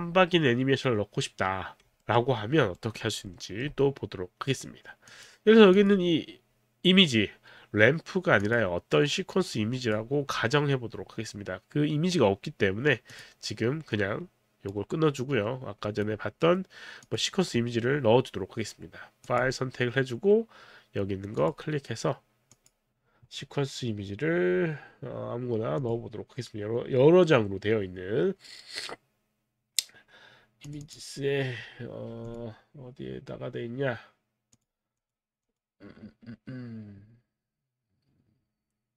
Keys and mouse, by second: 2.0 alt+middle click, 2.7 alt+right click, 3.3 alt+middle click, 5.1 click, 5.8 click, 8.4 click, 9.5 click, 13.1 click, 14.7 right click, 17.1 click, 19.2 click, 21.4 click, 22.5 click, 25.8 click, 30.6 click, 30.8 click, 32.2 click, 34.6 click, 35.0 click.